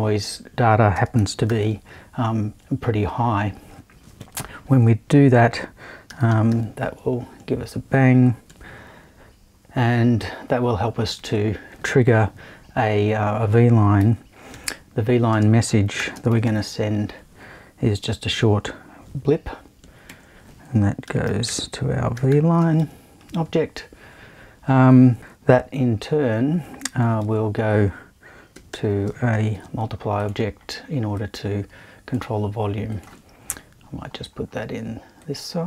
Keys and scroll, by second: 0.9 space, 1.2 1, 1.5 0, 4.2 super+1, 5.8-7.0 typing, 11.2 super+2, 14.0-16.9 typing, 20.1 super+i, 21.0 super+v, 21.2-23.3 typing, 27.2 super+i, 28.7 shift+8, 29.5 shift+`, 33.5 BackSpace.